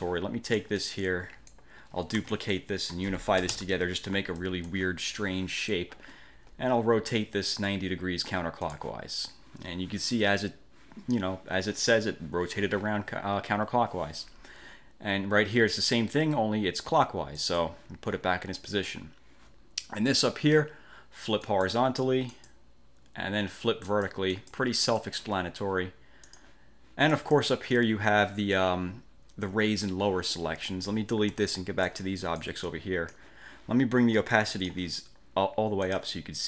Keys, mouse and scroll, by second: 2.4 ctrl+d, 2.5 ctrl+click, 3.6 ctrl+shift+=, 4.6 click, 8.8 click, 17.5 click, 21.6 click, 22.4 click, 24.0 click, 24.4 click, 25.0 click, 26.4 click, 27.2 click, 31.4 Delete, 32.0-33.4 drag, 34.4 click, 36.0 click.